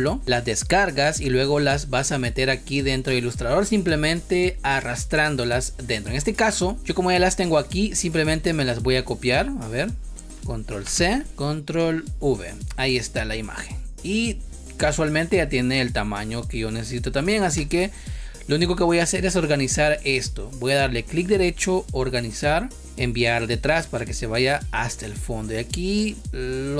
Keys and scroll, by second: 3.0 space, 10.8 ctrl+c, 11.7 ctrl+v, 17.5 space.